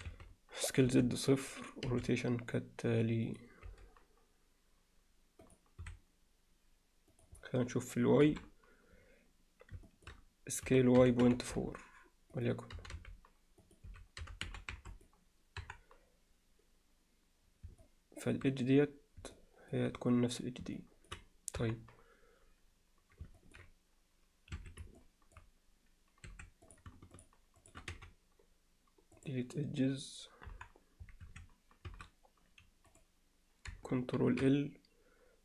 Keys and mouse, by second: 1.9 r, 3.7 g, 5.8 s, 8.3 KP_7, 9.9 alt+shift+middle click, 11.3 s, 12.8 g, 13.9 s, 15.6 KP_1, 17.8 alt+middle click, 19.4 middle click, 20.8 middle click, 21.6 KP_1, 23.4 ctrl+alt+middle click, 24.6 Escape, 25.0 alt+middle click, 26.3 2, 26.7 click, 27.2 shift+click, 27.9 x, 30.5 KP_1, 31.3 1, 31.9 a, 32.9 click, 34.3 ctrl+l.